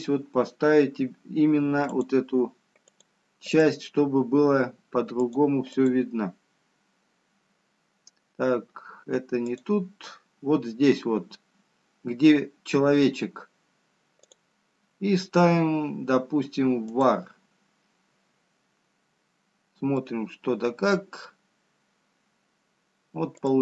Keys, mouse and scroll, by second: 1.5-2.1 scroll down 3, 2.1-4.0 scroll down 2, 4.0 click, 8.9 click, 11.6 click, 18.4 click, 22.1 middle click.